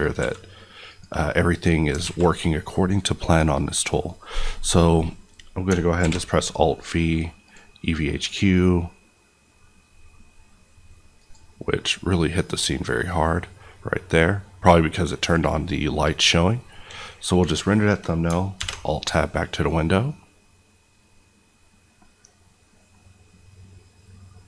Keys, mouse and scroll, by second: 0.0 click, 0.1 s, 0.9 click, 2.0 alt+a, 5.9 alt+v, 7.4 click, 18.5 alt+Tab.